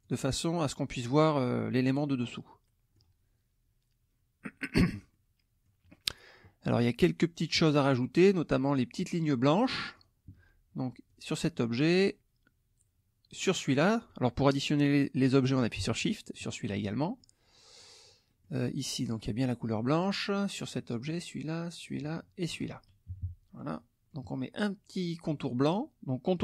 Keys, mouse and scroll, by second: 0.0 click, 1.4 middle click, 1.9-3.1 middle drag, 5.1 middle click, 9.9 click, 11.1 click, 13.4 shift+click, 16.4 shift+click, 17.2 shift+click, 18.3 click, 18.8 shift+click, 19.3 shift+middle click, 20.6 shift+click, 21.0 shift+click, 21.8 shift+click, 22.4 shift+click, 23.1 shift+KP_Subtract, 23.8 middle click.